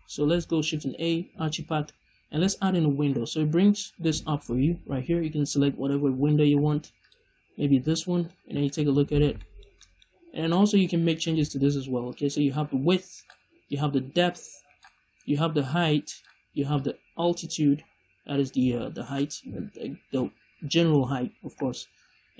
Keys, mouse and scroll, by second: 7.8 middle drag, 8.2-8.6 scroll up 2, 8.6-12.0 shift+middle drag, 8.9-9.3 scroll up 2, 12.0-13.2 drag, 13.2 right click, 13.6-14.7 drag, 14.7 right click, 15.2 click, 16.2 right click, 16.7-19.1 drag, 19.1 right click, 20.7 middle click.